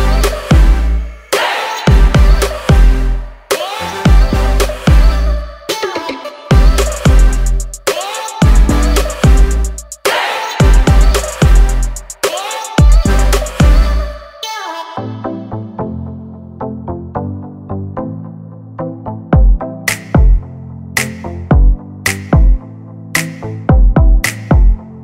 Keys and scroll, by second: 3.0 Down, 8.9 5, 9.1 0, 9.5 Return, 18.6 ctrl+c, 19.2 ctrl+f.